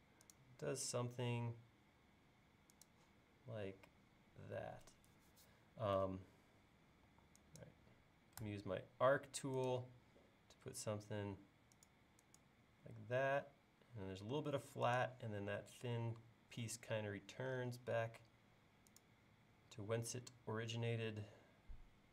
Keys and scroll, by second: 7.1 e, 8.5 a.